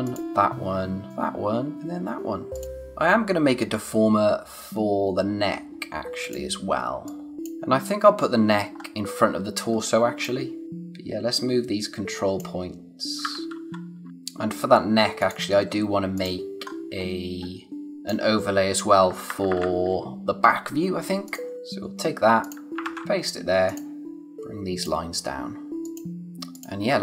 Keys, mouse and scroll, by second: 0.7-1.1 scroll up 1, 1.1 click, 1.5 scroll up 1, 1.7 click, 5.7-6.1 scroll down 1, 6.2 click, 6.8 space, 7.0 click, 7.3 space, 8.7-9.1 scroll up 1, 9.6 space, 9.8 click, 10.1 space, 10.6 click, 13.5 ctrl+z, 14.1 click, 16.6 scroll up 1, 17.8 click, 19.0 Up, 21.2 click, 21.5 c, 22.4 click, 22.8 ctrl+v, 23.6 click, 26.9 scroll down 1.